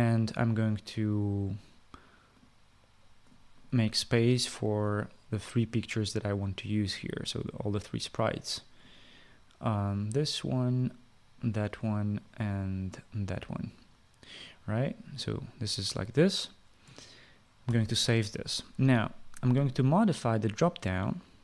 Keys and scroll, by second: 18.3 ctrl+s.